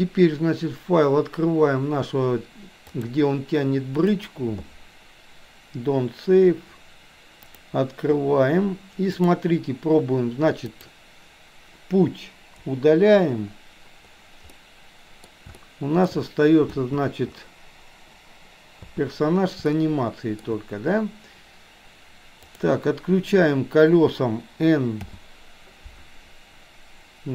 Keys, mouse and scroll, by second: 8.0 KP_3, 9.1 click, 10.8 click, 12.6 Delete, 14.5-15.3 middle drag, 15.5-16.1 shift+middle drag, 16.8 space, 19.3 space, 19.6-20.5 shift+middle drag, 22.4 click, 25.0 n.